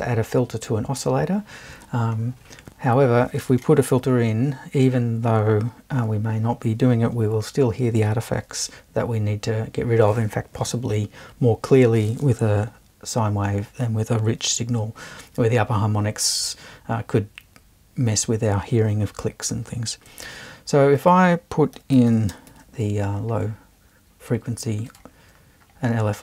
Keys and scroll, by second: 4.9 BackSpace, 20.2 super+i, 21.5-23.0 typing.